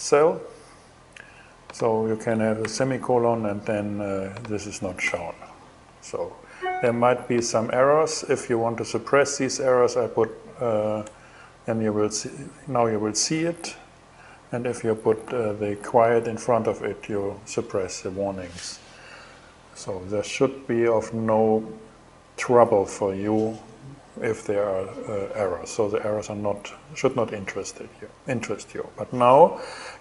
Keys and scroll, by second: 2.2 shift+,, 4.6 BackSpace, 10.6 BackSpace, 14.8 super+z.